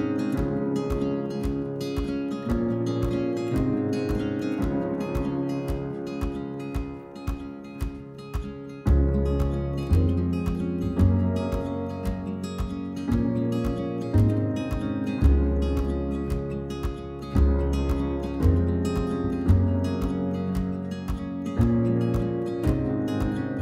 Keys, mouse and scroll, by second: 1.3 click, 2.3-2.9 middle drag, 2.9 l, 3.3 l, 4.8 h, 5.0 shift+middle click, 5.4-6.0 scroll up 2, 6.0 click, 6.1 scroll up 1, 6.4-7.1 middle drag, 7.1 alt+click, 7.2-7.7 middle drag, 7.7 scroll down 1, 7.8-8.6 middle drag, 8.6 alt+shift+click, 8.8-9.3 middle drag, 9.3 alt+shift+click, 10.3 ctrl+z, 10.9 alt+shift+click, 11.6 right drag, 11.9 middle click, 12.1-13.0 scroll up 2, 13.0-13.8 middle drag, 13.8 click, 15.0 scroll down 2, 15.2-16.4 middle drag, 16.4 scroll up 1, 16.7-17.5 middle drag, 17.5-18.1 scroll up 1, 18.1 drag, 18.6-20.5 middle drag, 20.5 KP_3, 20.8 shift+middle click, 20.9 scroll up 1, 21.5 ctrl+r.